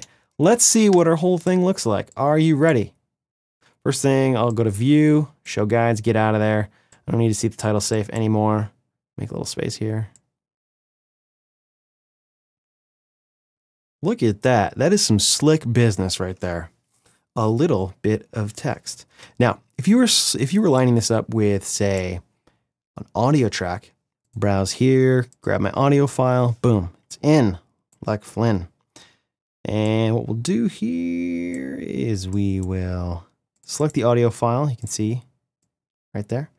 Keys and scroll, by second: 1.9 space, 7.5 space, 18.8 space.